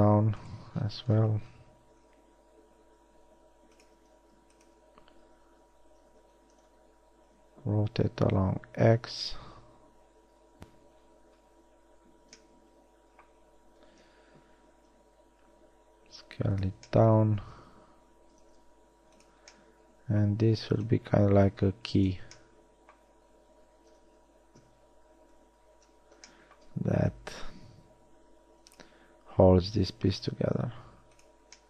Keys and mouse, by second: 2.3 s, 4.3 g, 5.9 r, 8.6 s, 14.4 KP_1, 15.1 s, 18.7 g, 24.5 ctrl+KP_3, 25.7 ctrl+KP_1, 27.3 s, 29.3 g.